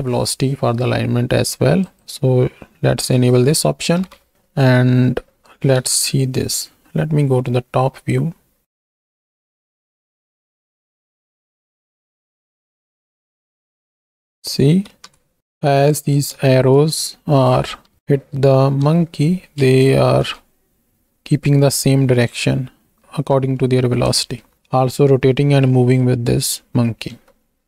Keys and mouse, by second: 1.8 click, 3.9 shift+Right, 4.2 shift+Left, 5.7 KP_7, 7.7 space, 12.4 space, 13.4 ctrl+space, 13.9 shift+click, 15.0 KP_1, 15.4 click, 16.6 shift+middle click, 17.9 Right, 18.0 Right, 18.0 Left, 18.7 KP_7, 19.6 ctrl+space, 20.5 space, 21.3 space, 22.5 z, 23.5 click, 23.7 middle click, 23.7 click, 24.1 space, 25.8 middle click.